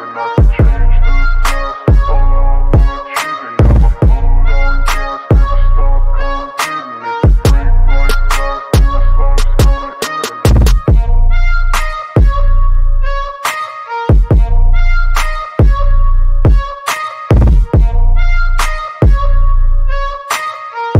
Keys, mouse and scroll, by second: 0.6 click, 2.2 click, 4.2 click, 5.0 click, 7.2 right click, 8.1 click, 9.5 click, 10.7 click, 12.5 click, 13.9 click, 15.8-18.1 drag.